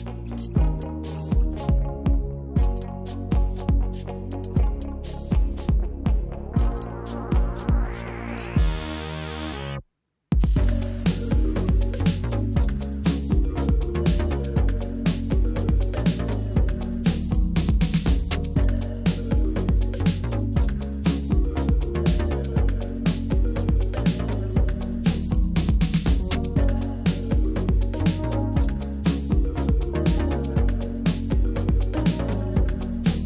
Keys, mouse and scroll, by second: 0.2 click, 0.7 shift+middle click, 1.4-1.8 middle drag, 2.4 Tab, 3.1 click, 3.7 Delete, 4.9 middle click, 5.8 click, 6.4 Delete, 6.9 middle click, 7.4 KP_1, 9.4 ctrl+r, 11.3 z, 11.9 click, 13.5 click, 14.0-14.5 drag, 15.8 click, 16.4 middle click, 16.8-17.3 middle drag, 17.6 KP_1, 19.0 click, 19.9 click, 20.1 middle click, 20.8 e, 21.2 Escape, 21.5 s, 22.2 click, 22.9 e, 22.9 z, 24.1 click, 24.5 Escape, 24.5 e, 24.9 s, 25.7 click, 26.1 e, 26.4 z, 27.4 click, 27.6 middle click, 28.1 KP_1, 28.7-29.2 middle drag, 29.5 KP_1, 30.1 middle click, 30.8 KP_1, 31.1 middle click, 32.8 alt+click.